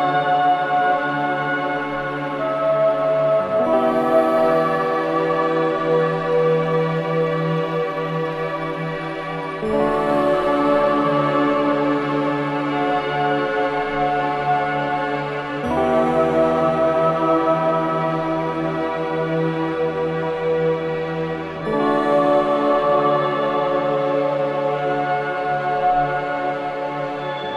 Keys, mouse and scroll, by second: 13.1-13.6 scroll up 1, 16.2 scroll down 1, 17.0 scroll up 1, 17.3 scroll down 1, 18.0-18.4 scroll up 1, 21.0-21.5 scroll down 1, 22.5 click, 23.7-24.1 scroll down 1, 24.1 scroll up 1, 25.0-27.5 shift+drag.